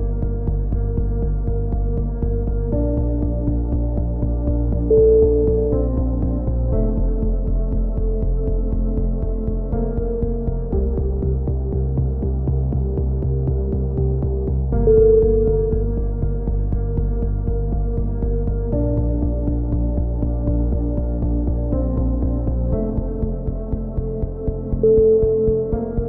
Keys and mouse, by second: 0.4 a, 0.9 middle click, 1.9 click, 2.5 right click, 3.0 KP_3, 3.6 z, 3.6 g, 6.3 click, 6.3-8.0 middle drag, 7.9 click, 8.4 g, 9.1 a, 9.2 z, 10.3-11.4 drag, 11.3 right click, 11.8 alt+m, 12.1 a, 12.3 right click, 12.9 KP_3, 13.9 e, 14.1 click, 15.4 z, 15.6 right click, 15.8 click, 16.1 right click, 16.4-17.8 drag, 17.9 right click, 18.2 click, 18.9 click, 19.9-22.0 typing, 20.3 click, 20.9 right click, 22.1 click, 24.9 right click, 25.4 g.